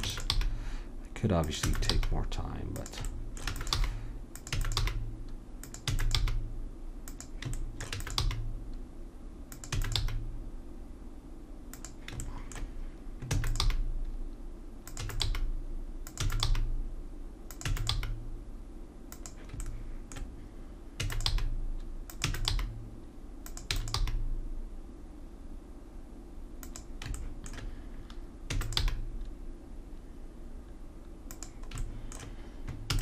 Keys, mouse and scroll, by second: 0.0 e, 0.4 g, 1.7 e, 1.9 g, 3.5 e, 3.8 g, 4.6 e, 4.8 g, 5.8 e, 6.2 g, 7.9 e, 8.2 g, 9.7 e, 10.0 g, 13.4 e, 13.6 g, 15.0 e, 15.3 g, 16.2 e, 16.5 g, 17.7 e, 18.0 g, 21.0 e, 21.3 g, 22.3 e, 22.5 g, 24.0 g, 28.5 e, 28.8 g, 32.9 e.